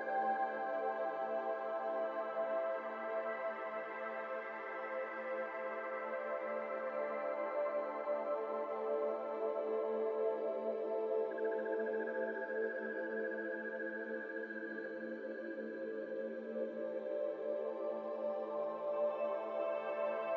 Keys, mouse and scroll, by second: 1.7 shift+middle click, 2.2 scroll up 1, 2.4 s, 3.1-3.8 g, 3.9 scroll down 1, 3.9 middle click, 4.8 Tab, 5.1-5.7 shift+middle drag, 5.7 shift+click, 7.0 ctrl+KP_Subtract, 7.4 ctrl+z, 8.0 ctrl+KP_Add, 8.7 ctrl+z, 9.5 click, 9.9 ctrl+a, 10.9 click, 11.1 ctrl+a, 11.7-12.1 middle drag, 12.1 click, 12.5 click, 12.8 click, 13.2 shift+click, 14.1 ctrl+KP_Subtract, 14.7 ctrl+z, 15.0-15.5 scroll up 2, 15.5 click, 16.2-17.6 right drag, 17.6 shift+click, 18.5 ctrl+KP_Subtract, 18.9 ctrl+z, 19.2 ctrl+KP_Add, 19.7 ctrl+z.